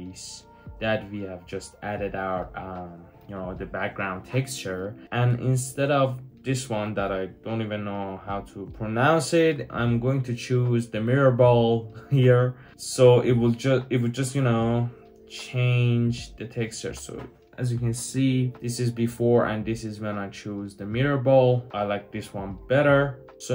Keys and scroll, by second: 16.6 super+z.